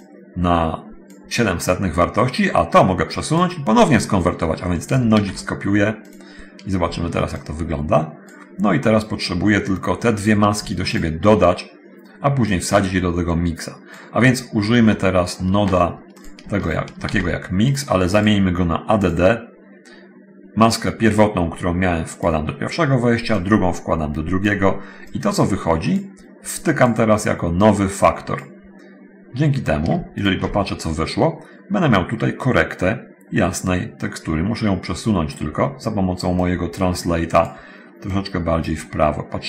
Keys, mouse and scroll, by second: 0.0-1.5 drag, 2.6-3.7 drag, 4.5-5.3 drag, 7.6 ctrl+shift+click, 9.1 middle click, 10.5 click, 11.0 shift+click, 12.7-14.3 drag, 14.7 middle click, 15.1 middle click, 16.4 shift+click, 17.3 shift+d, 17.9 click, 19.3 click, 20.9-22.7 drag, 23.5-24.9 drag, 25.3-26.4 drag, 26.7 click, 27.9 click, 30.1 ctrl+shift+click, 36.3-37.7 drag, 38.3 click.